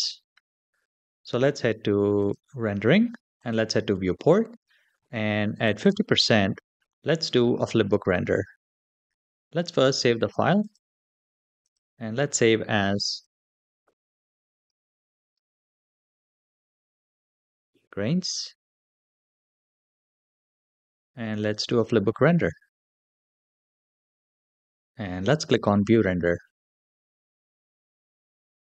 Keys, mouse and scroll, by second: 0.3-2.2 scroll up 2, 2.2 click, 2.2 scroll up 1, 3.2 click, 5.5 click, 10.4-11.7 drag, 21.2 click, 27.6 click.